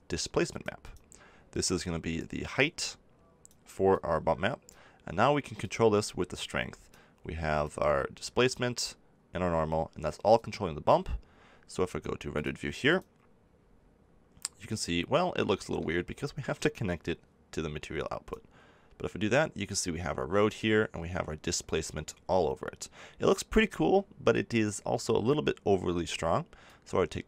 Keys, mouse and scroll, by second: 11.4 click, 13.6 click, 16.7-18.4 drag, 25.9 middle click, 26.6 click.